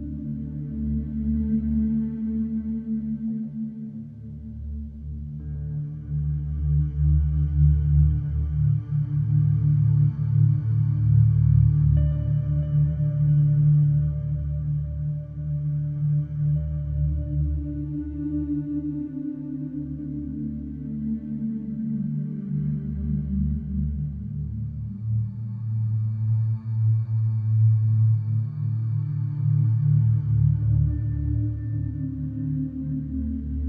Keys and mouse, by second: 3.9 s, 3.9 z, 4.7 s, 4.8 alt+z, 7.0 ctrl+z, 20.4 ctrl+s, 28.1-28.9 middle drag, 30.0 shift+a.